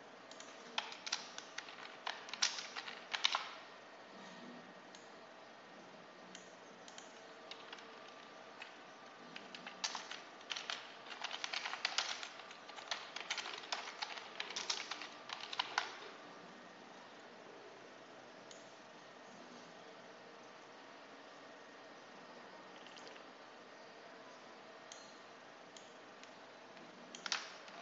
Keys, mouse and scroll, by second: 0.2 click, 0.9-3.6 typing, 4.8-6.4 drag, 6.7 click, 7.6 Delete, 9.4 End, 9.7 Return, 10.1-15.6 typing, 18.4-20.8 drag, 23.0-24.3 drag, 24.5 click, 25.6-27.2 drag, 27.4-27.8 typing.